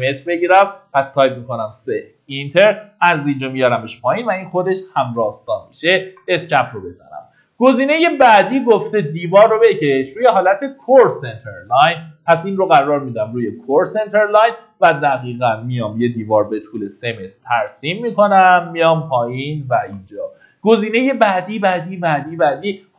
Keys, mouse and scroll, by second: 3.0 click, 6.5 Escape, 7.2 middle click, 11.8 click, 16.5 KP_3, 18.0 click, 20.2 Escape, 20.6 scroll down 1, 22.6-22.9 middle drag.